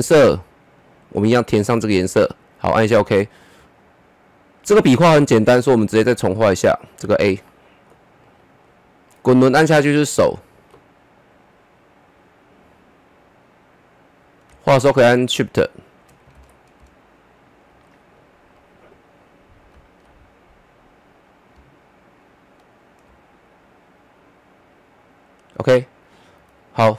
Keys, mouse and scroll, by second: 3.2-3.6 scroll up 1, 3.6 middle click, 4.3-6.1 scroll up 1, 6.6 click, 7.4 middle click, 7.5 middle click, 8.6-12.0 middle drag, 12.0-16.3 drag, 16.3 ctrl+z, 17.0 shift+click, 17.8 middle click, 21.1-26.0 drag.